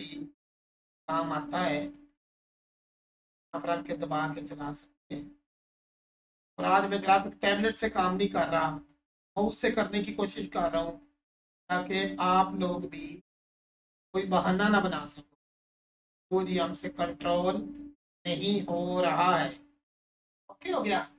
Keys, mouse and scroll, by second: 3.1 alt+click, 5.9 alt+click, 7.6 alt+click, 9.6 alt+click, 10.7 alt+click, 12.3 alt+click, 14.6 1, 15.7 click.